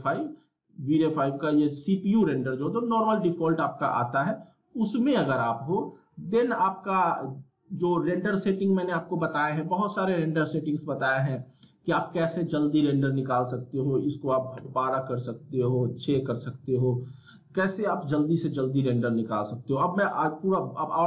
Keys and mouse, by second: 8.3 click, 17.2 click.